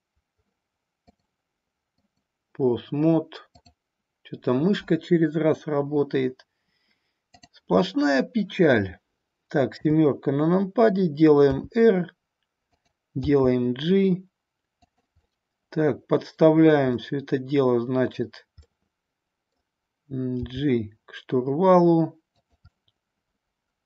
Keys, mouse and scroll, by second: 1.0-2.2 drag, 7.2 click, 9.7 KP_7, 11.5 r, 12.7 click, 13.1 g, 14.8 drag, 15.4-16.6 middle drag, 16.8-18.2 middle drag, 18.6-19.5 middle drag, 20.3 g, 22.3 click, 22.7-23.8 middle drag.